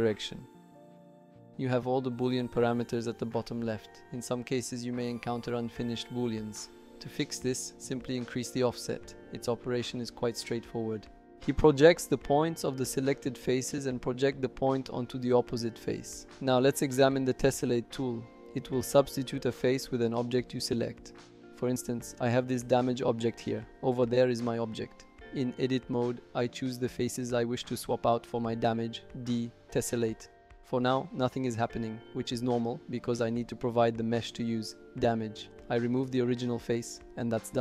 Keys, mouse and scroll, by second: 1.9 click, 2.8 click, 6.2 click, 9.4-10.5 drag, 11.3-12.6 drag, 13.0-14.2 middle drag, 14.6 click, 15.3 middle click, 15.5 typing, 22.7 click, 23.8 click, 24.9 shift+middle drag, 25.8 Tab, 26.1 middle click, 26.5 click, 27.1 shift+click, 27.7 shift+click, 28.2 shift+click, 28.6 shift+click, 33.1 click, 34.4 typing.